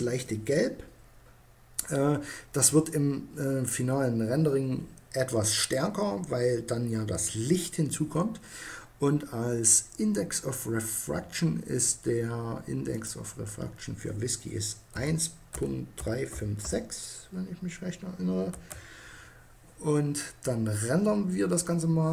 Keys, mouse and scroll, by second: 12.0-13.5 drag, 21.2-22.1 drag.